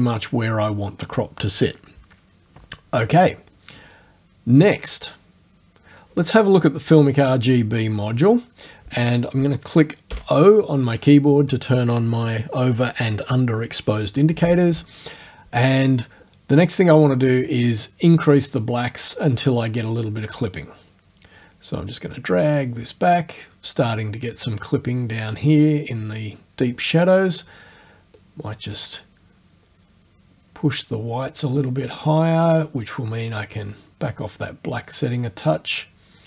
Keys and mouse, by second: 7.3 click, 10.2 o, 20.1-24.5 drag, 28.2-32.3 drag, 33.3-36.2 drag.